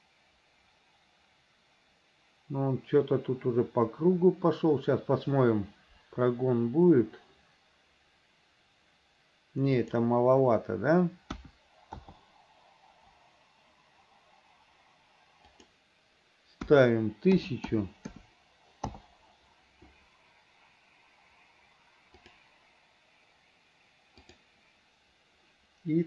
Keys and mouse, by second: 9.9-12.1 drag, 15.6-19.1 drag, 17.8 KP_0, 22.4 click, 24.3 click.